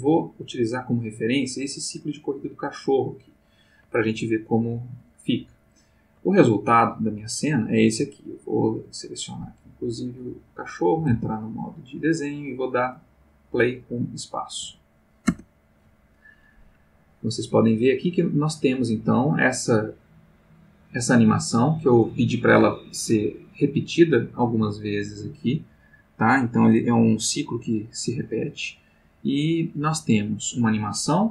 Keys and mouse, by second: 3.3-5.1 drag, 5.9 click, 8.6 click, 11.1 ctrl+Tab, 11.9 click, 14.6 space.